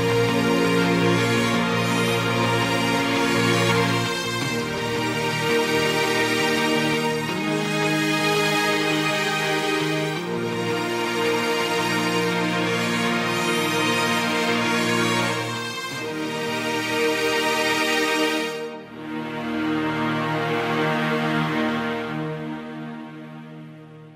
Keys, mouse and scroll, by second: 0.6 f, 1.0-3.0 right drag, 3.0-6.1 drag, 6.1-6.8 scroll up 1, 6.8 click, 8.2 g, 9.7 click, 9.8 g, 11.3 click, 11.5 g, 12.7 shift+middle click, 13.6-14.1 scroll up 1, 14.1 click, 14.8 g, 16.3 click, 16.5 g, 18.5 click, 18.7 g, 20.1-21.2 scroll down 4, 21.2 KP_1, 23.0-23.7 scroll down 1, 23.7 KP_3.